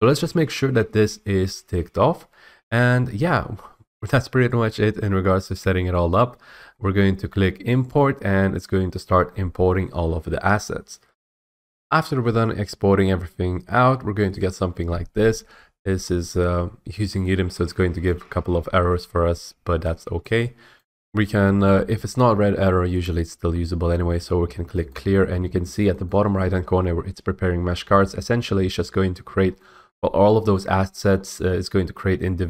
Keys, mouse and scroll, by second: 5.5-7.9 scroll, 7.9 click, 18.0 click, 19.9 F8, 19.9 click, 20.8 F8, 24.7 click, 26.0 click, 29.9-30.3 scroll up 3, 30.3-31.0 scroll down 3, 31.0-31.5 scroll down 4, 31.5-32.4 scroll.